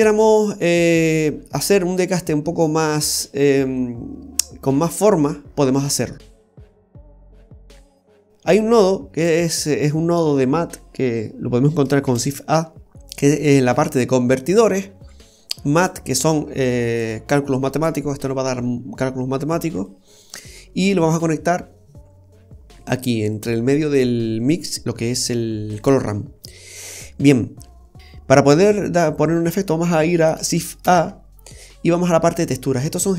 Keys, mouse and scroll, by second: 0.7-1.0 scroll up 1, 5.4-6.2 scroll down 6, 6.1 middle click, 7.3 click, 12.1 shift+a, 19.9 click, 25.3 click, 30.9 shift+a.